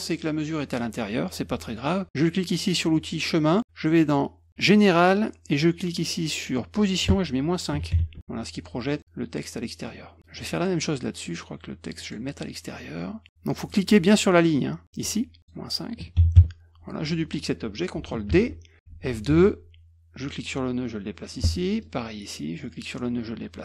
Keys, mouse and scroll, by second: 2.6 click, 4.6 click, 6.8 click, 8.9 middle click, 9.6 middle click, 10.5 click, 11.2 click, 11.9 click, 13.6 click, 14.2 click, 15.4 click, 18.2 ctrl+d, 19.0 F2, 20.2-21.3 drag, 21.5 middle click, 21.8 scroll up 1, 22.7-23.6 drag.